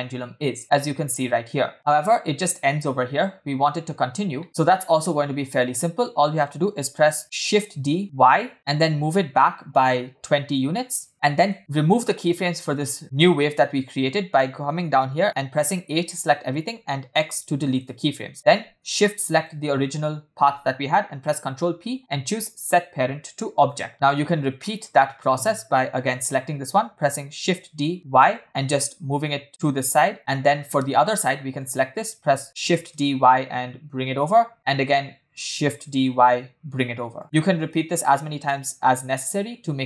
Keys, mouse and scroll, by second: 2.9 space, 4.1 scroll down 2, 4.4 middle click, 4.8 shift+middle drag, 5.2-6.1 scroll up 2, 7.4 shift+d, 11.2-11.5 shift+middle drag, 11.6-11.9 scroll down 1, 15.2 t, 15.9 a, 17.2 x, 19.3 shift+click, 21.2 ctrl+p, 23.9 shift+middle click, 23.9-24.5 scroll down 2, 24.6 shift+middle drag, 25.0-25.7 scroll up 1, 26.1 click, 27.4 shift+d, 30.2 shift+middle click, 30.7 shift+middle drag, 31.6 click, 32.6 shift+d, 34.5-34.9 shift+middle drag, 35.8 shift+d, 37.3 shift+middle click, 38.2 shift+d.